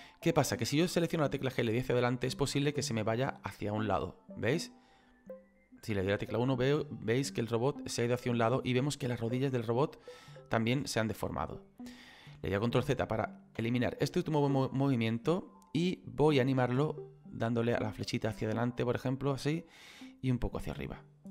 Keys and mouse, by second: 1.6 KP_1, 3.9 click, 14.9 middle click, 17.7 click, 20.3 click.